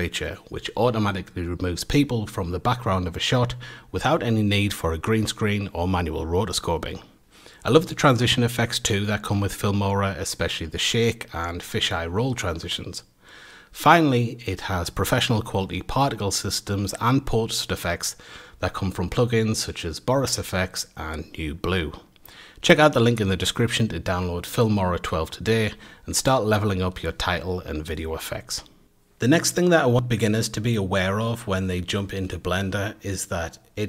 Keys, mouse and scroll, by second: 7.2 space, 16.3 space.